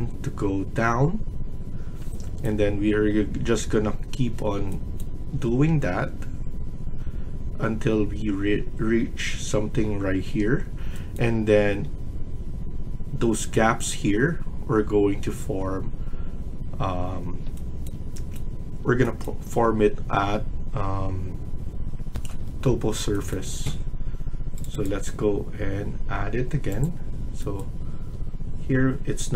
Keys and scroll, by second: 22.0 F1, 22.1 F1, 27.8 Escape.